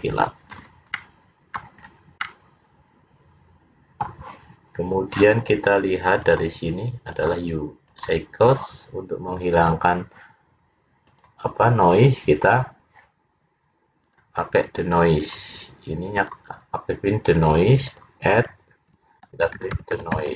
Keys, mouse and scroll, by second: 1.0 middle click, 2.0-2.7 scroll down 5, 2.3 middle click, 6.3 click, 7.2 click.